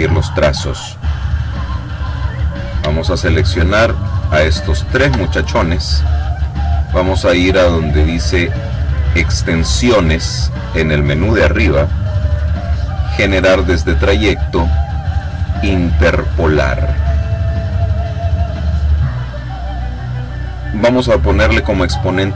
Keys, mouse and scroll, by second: 1.7 click, 3.3 shift+click, 4.3 click, 8.9 click, 15.4 click, 17.1-18.9 drag, 20.4 click, 22.0 KP_0.